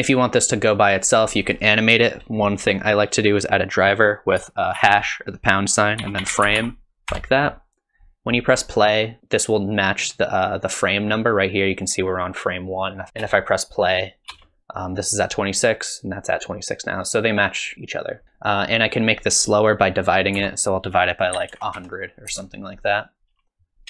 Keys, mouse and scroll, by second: 0.9 click, 13.1 space, 13.2 space, 15.3 space, 18.2 click, 21.8 KP_0.